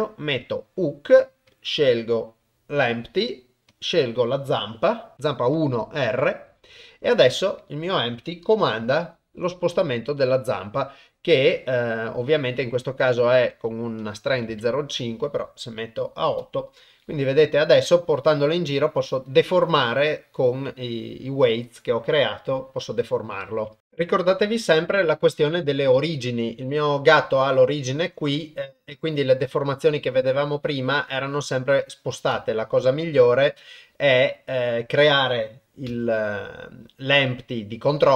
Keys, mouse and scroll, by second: 3.8-5.7 drag, 8.6 g, 14.2 click, 16.9 g, 32.3 shift+s, 35.9 shift+a.